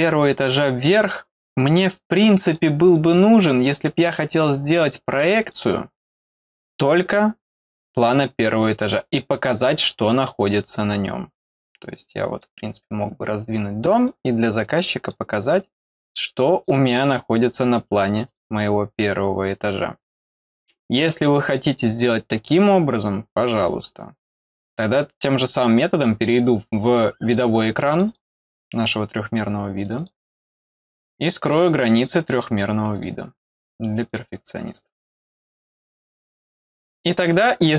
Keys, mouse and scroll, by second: 1.0-2.5 drag, 5.4 click, 7.4 middle click, 7.4-8.3 scroll up 2, 7.7 middle click, 9.0 middle click, 10.5-12.4 drag, 14.0-15.1 drag, 16.0 click, 18.2 click, 20.9 middle click, 25.5 click, 25.7 click, 26.6 scroll down 1, 27.0 middle click, 27.9 click, 28.0 click, 29.8 click, 29.9 click, 31.4 click, 31.9 click, 32.9 click, 33.5 click, 34.0 click, 35.0 click, 35.1 click, 36.0 middle click.